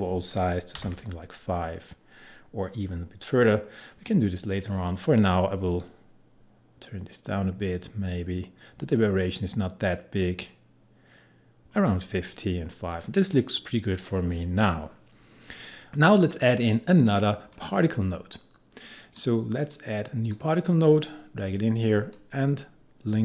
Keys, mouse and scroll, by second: 0.8 5, 5.8-14.4 drag, 15.9-23.2 drag.